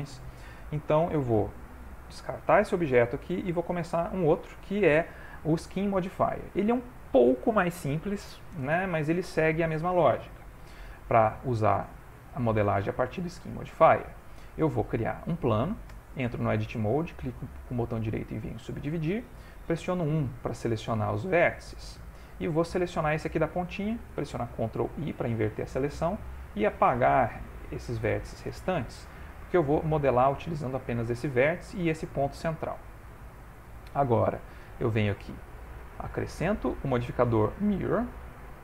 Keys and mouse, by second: 0.5 Tab, 1.3 x, 2.4 shift+middle click, 2.6 middle click, 3.1 ctrl+middle click, 3.5 shift+middle click, 10.7 shift+a, 13.2 middle click, 13.8 ctrl+middle click, 15.9 Tab, 16.4 right click, 19.8 1, 21.5 click, 23.0 click, 24.9 ctrl+i, 25.7 Delete, 27.0 Up, 27.2 Up, 29.6 click, 29.8 g, 33.2 click.